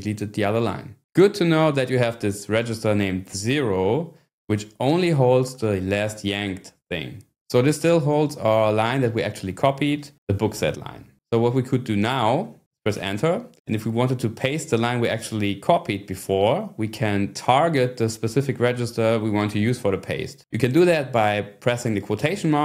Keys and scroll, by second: 13.0 Return, 22.4 ".